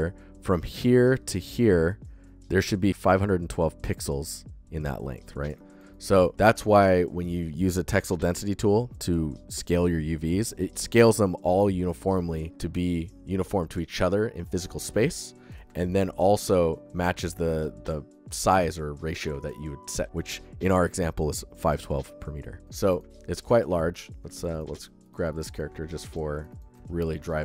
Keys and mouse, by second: 5.2 ctrl+alt+middle click, 5.4 alt+middle click, 5.7 alt+shift+middle click, 5.9 middle click, 15.6 alt+middle click, 16.0 alt+shift+middle drag, 16.2 alt+middle drag, 19.2 alt+shift+middle click, 19.5-19.8 alt+middle drag, 19.9 alt+shift+middle drag, 22.7 alt+shift+middle drag, 22.9 middle click, 24.1 shift+click, 24.2 shift+middle click, 24.3 ctrl+alt+middle click, 24.9 click, 25.1 shift+middle click, 25.2 alt+shift+click, 25.3 alt+click, 26.2 ctrl+middle click, 26.2 ctrl+alt+click, 26.3 alt+middle drag, 27.0 click.